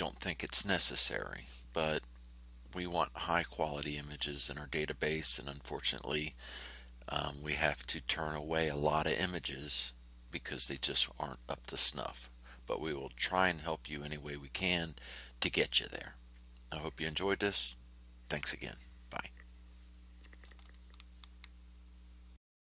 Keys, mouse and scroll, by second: 4.5-5.7 drag, 5.7 middle click, 10.4-11.6 middle drag, 11.6 click, 12.3 middle click, 12.5 click, 13.0 middle click, 22.6 F8.